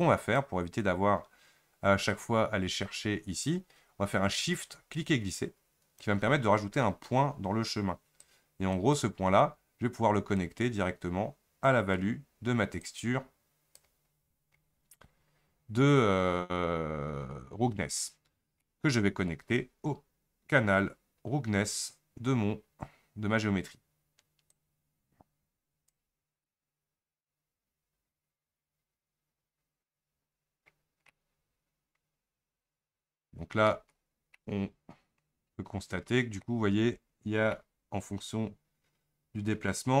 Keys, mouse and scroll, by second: 0.4 click, 6.0 shift+right click, 9.0 click, 12.0-28.1 drag, 31.2-34.0 middle drag, 34.0-34.4 scroll up 5, 34.4-36.5 middle drag, 36.5-37.0 scroll up 1, 37.6-40.0 middle drag.